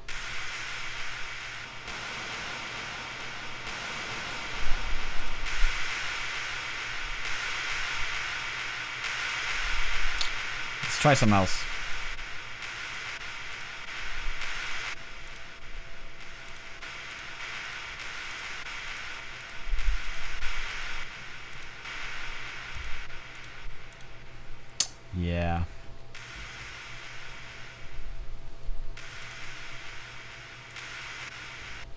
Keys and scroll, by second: 25.4 space, 27.2 space, 28.4 typing, 31.5-31.9 typing.